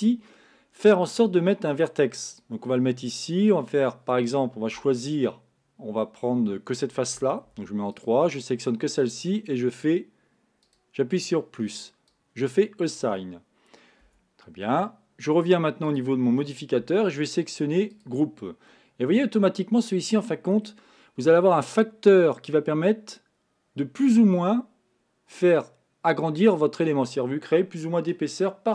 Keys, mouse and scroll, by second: 2.4 click, 4.8 Tab, 7.6 3, 8.0 click, 10.7-14.1 drag, 14.1 Tab, 15.9 click, 17.3-18.9 drag, 18.9-21.7 middle drag, 22.3-25.3 drag.